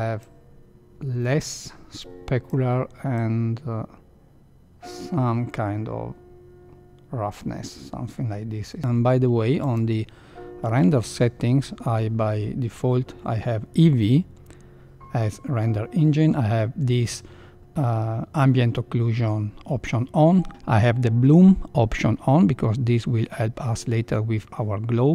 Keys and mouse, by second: 0.1-2.4 drag, 3.3-8.7 drag.